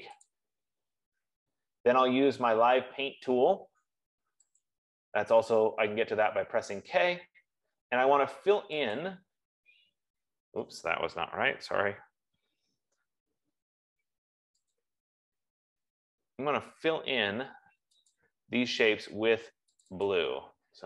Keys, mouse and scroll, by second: 0.8 click, 4.9 click, 9.5 click, 10.5 F15, 12.5 ctrl+z, 15.2 click, 18.6 click, 20.2 click, 20.5 click.